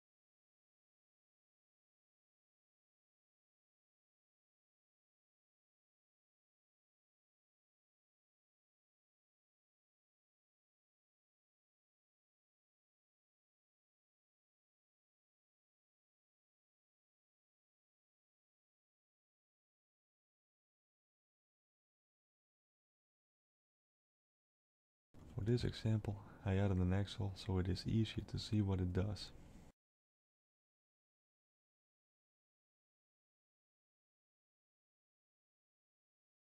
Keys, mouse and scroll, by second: 0.9 scroll down 2, 1.6-2.5 scroll down 6, 3.4 click, 3.4-3.9 scroll down 5, 4.2 click, 8.0 KP_0, 8.2 KP_0, 9.0 click, 10.9 click, 12.6 KP_0, 12.7 KP_0, 14.0 click, 17.8 middle click, 18.7 shift+middle click, 19.4 shift+a, 34.3 middle click, 36.1 click.